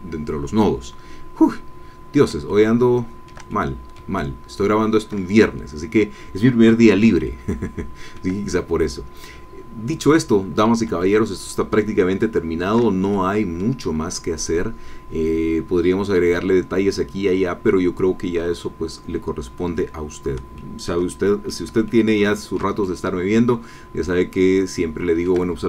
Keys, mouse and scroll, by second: 0.3-0.6 scroll down 2, 0.9-1.4 scroll up 2, 1.7 scroll down 2, 2.4-3.4 shift+middle drag, 3.5-5.2 shift+middle drag, 5.6 scroll down 2, 7.2 shift+middle click, 7.3 shift+click, 7.9 shift+middle click, 8.6-9.2 shift+scroll down 3, 9.2 middle click, 9.4-10.0 scroll up 2, 10.5 scroll up 2, 11.0-12.9 shift+middle drag, 13.1 shift+middle click, 13.9-14.6 scroll down 2, 17.5-18.0 scroll up 4, 19.5-20.2 scroll down 4, 20.5 shift+middle click, 21.1 shift+middle click, 21.6 ctrl+click, 21.8 ctrl+click, 22.8-25.4 ctrl+shift+middle drag.